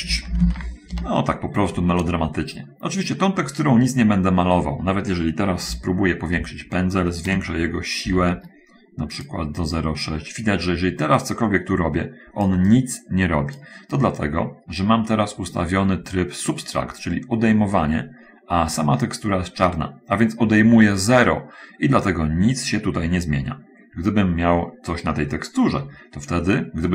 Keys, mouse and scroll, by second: 0.0-0.6 typing, 1.3 Return, 6.1 ], 6.3 ], 7.9 shift+f, 10.1-12.5 drag, 12.8-14.1 drag, 14.9 middle click.